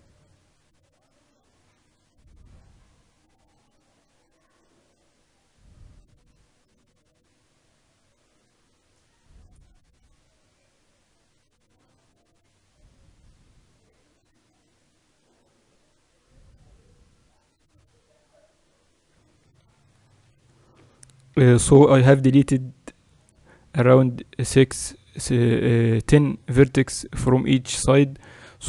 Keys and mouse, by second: 20.4 KP_7, 21.4-23.6 middle drag.